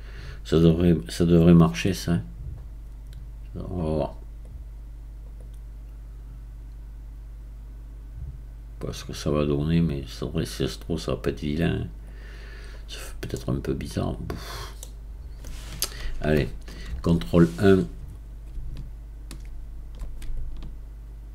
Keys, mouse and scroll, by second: 4.4-10.0 drag, 12.0-13.3 drag, 13.3-16.9 middle drag, 16.9 ctrl+KP_1, 18.7-21.3 shift+right drag.